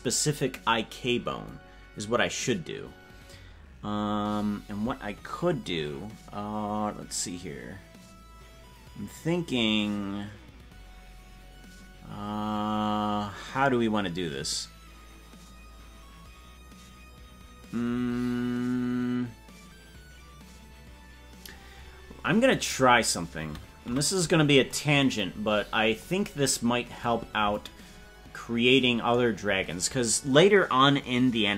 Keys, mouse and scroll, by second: 23.9 KP_Decimal, 25.4-26.2 scroll down 8.